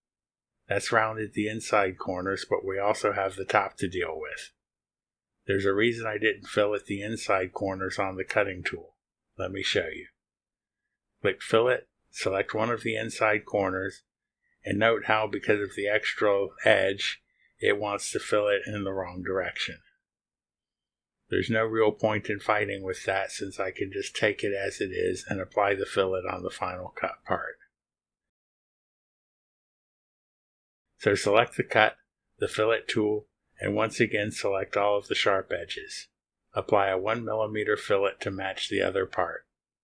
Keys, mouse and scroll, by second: 0.1 click, 2.0-3.1 middle drag, 3.1-5.9 drag, 8.5 ctrl+z, 10.5 click, 10.6 space, 11.1 middle click, 11.3 click, 12.2 click, 13.5 click, 14.8 click, 15.8 click, 20.3 ctrl+z, 22.9 click, 23.1 space, 23.8 ctrl+click, 24.4 ctrl+click, 26.4 click, 27.5 scroll up 2, 27.5 middle click, 27.7 right click, 28.0 scroll down 2, 28.2 click, 29.6 click, 29.7-30.3 scroll down 1, 30.4 click, 32.4 click, 33.3 click, 35.1 click, 36.0 click, 37.1 click, 38.1 click, 39.2 click.